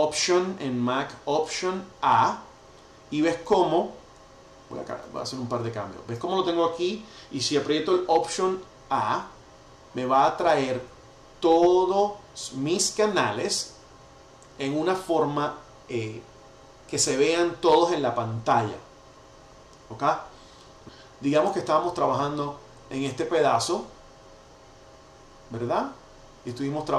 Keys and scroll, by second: 1.8 alt+a, 4.8 super+[, 9.0 alt+a, 21.4 super+].